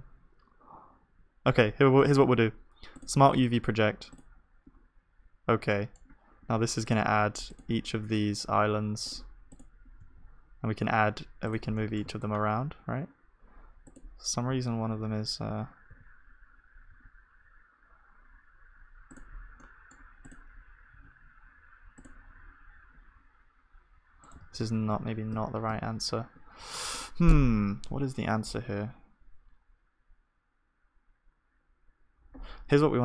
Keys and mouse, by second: 2.0 u, 6.9-10.1 drag, 6.9 middle click, 6.9 right click, 10.1 g, 12.6-14.5 middle drag, 14.5 s, 24.4-25.8 ctrl+z, 27.1-28.6 drag.